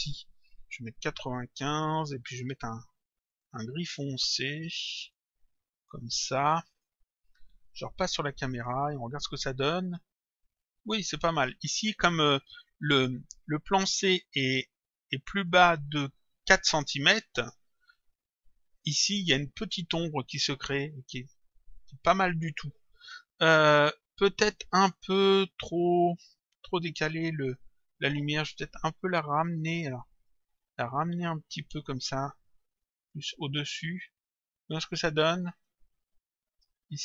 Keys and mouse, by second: 1.7 click, 3.3 click, 5.8 click, 8.5 click, 15.4 click, 18.7 click, 26.7 click, 27.7 middle click, 30.2 middle click, 31.6 click, 33.7 middle click, 35.6 click.